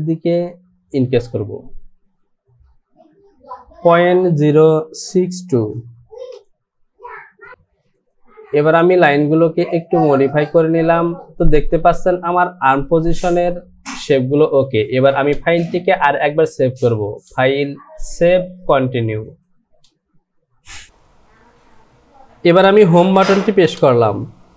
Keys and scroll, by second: 3.7 KP_Decimal, 4.2 KP_Decimal, 5.5 KP_0, 6.3 Return, 23.9 Home.